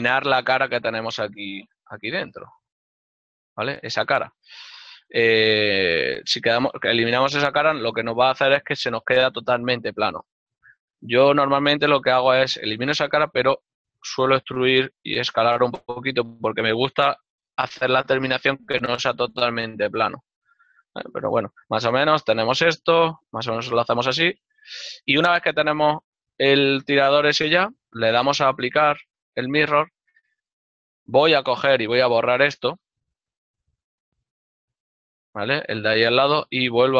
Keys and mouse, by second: 0.4 middle click, 6.0 right click, 6.5 x, 9.8 click, 12.0 alt+right click, 13.1 e, 16.1 click, 19.9 middle click, 25.4 ctrl+r, 26.6 Tab, 26.8 ctrl+middle click, 27.7 shift+middle click, 28.0 ctrl+middle click, 29.0 click, 31.4 Tab, 31.5 click, 32.3 right click, 33.0 l, 34.0 click, 34.7 Tab, 35.4 click.